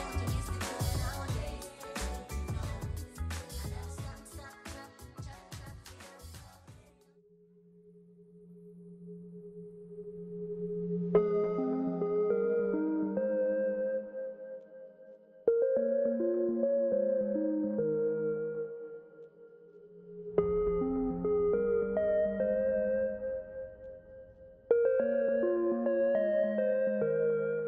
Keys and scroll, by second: 9.4-10.3 typing, 12.7 shift+Right.